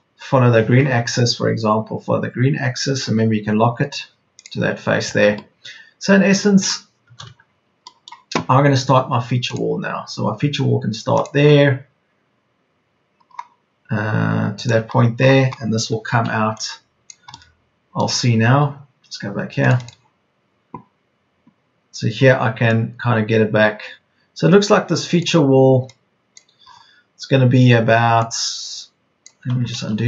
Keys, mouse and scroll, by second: 2.8 Left, 7.2 Escape, 16.0 p, 29.8 ctrl+z.